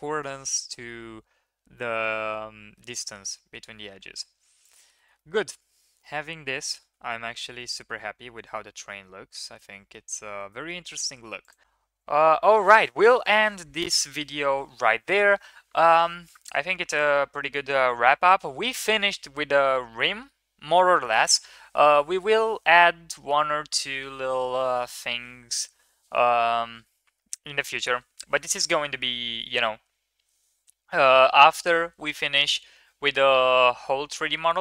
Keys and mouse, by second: 0.5-1.2 drag, 1.2-2.5 middle drag, 2.5 drag, 3.0 Tab, 3.5 Tab, 4.1 ctrl+s, 4.9 shift+middle drag, 5.2 middle drag, 6.9 KP_1, 7.5-7.9 drag, 8.4 shift+middle drag, 8.7-9.5 middle drag, 9.5-9.9 drag, 10.5 shift+middle drag, 11.4 click, 11.6 KP_1.